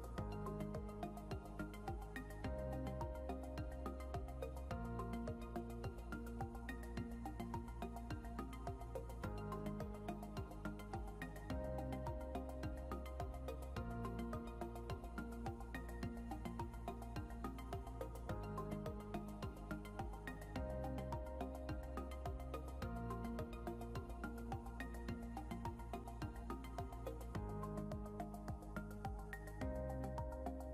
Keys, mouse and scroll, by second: 0.3 ctrl+z, 1.1 click, 10.4-11.3 scroll down 1, 12.7 click, 17.3 right click, 18.5 click, 22.2 scroll up 1, 23.7 click, 24.3 scroll up 1, 25.6 click, 30.3 click.